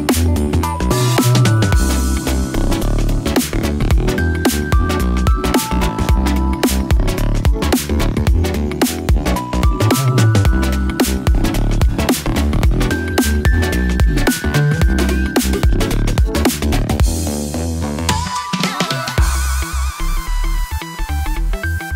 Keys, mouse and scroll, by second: 0.3 click, 0.6 click, 0.8 g, 1.8 click, 3.9 click, 4.7 g, 4.8 g, 5.5 click, 6.2 g, 7.0 g, 9.2-11.4 typing, 9.7 click, 10.6 click, 12.1 click, 12.6 click, 13.0 g, 13.4 click, 14.2 middle click, 15.7 middle click, 16.7 shift+click, 17.2 g, 17.3 g, 18.0 click, 18.3 click, 18.5-21.8 typing, 19.0 click, 19.4 click, 20.2 click.